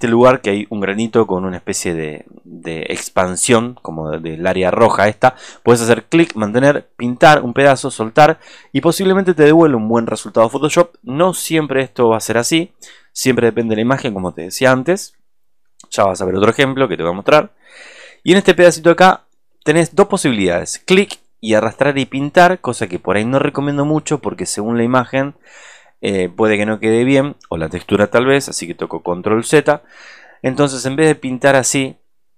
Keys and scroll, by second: 28.6 alt+space, 28.9 ctrl+z.